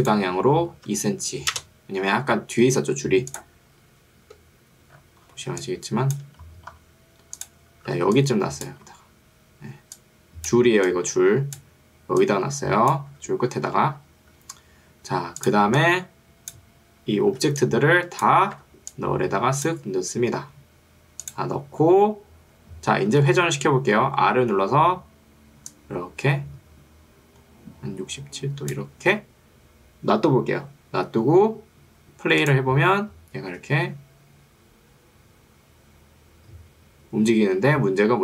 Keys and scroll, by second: 1.6 Return, 4.2 F3, 5.6 1, 8.0 ctrl+2, 13.2 Escape, 14.0 F1, 17.4 ctrl+2, 18.6 Escape, 23.2 r.